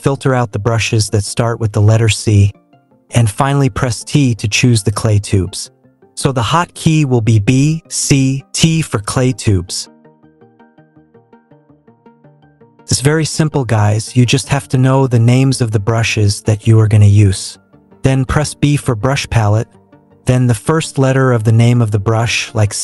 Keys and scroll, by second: 3.4 t, 6.8 c, 18.1 b, 22.6 c.